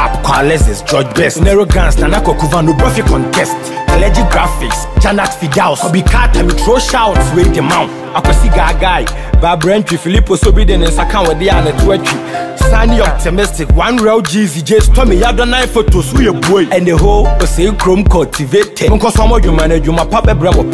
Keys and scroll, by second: 12.4 ctrl+t.